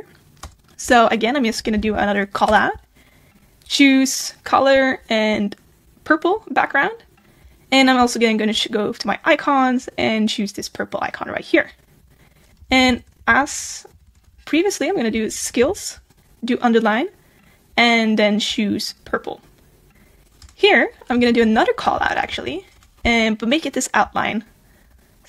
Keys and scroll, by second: 15.4 super+a.